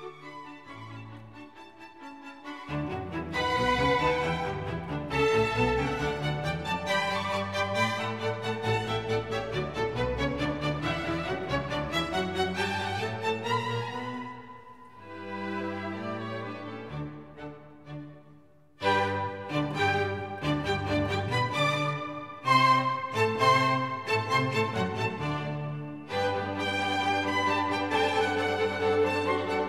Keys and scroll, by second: 29.5 2.